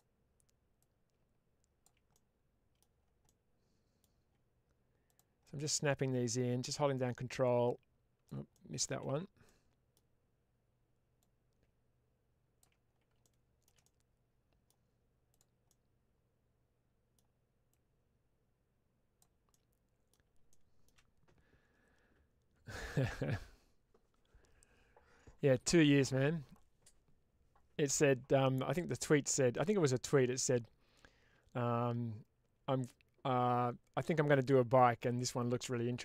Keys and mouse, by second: 0.7 click, 2.0 middle click, 3.2 middle click, 5.0 click, 5.3 middle click, 6.2-8.2 ctrl+drag, 8.4 middle click, 8.9 ctrl+z, 9.3 middle click, 11.1-12.5 drag, 13.2 shift+middle click, 13.7 middle click, 15.5-17.0 middle drag, 17.6-19.1 drag, 19.4 middle click, 20.4 shift+middle click.